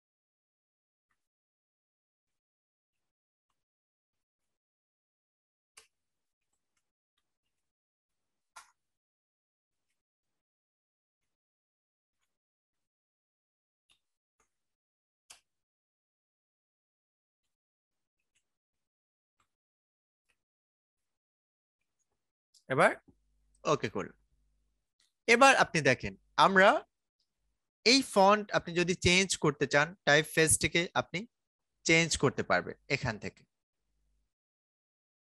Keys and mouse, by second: 0.5-2.8 typing, 3.9-8.0 typing, 8.5 Return, 9.2-11.6 typing, 13.5-20.2 typing, 23.4-28.5 drag, 28.5 click.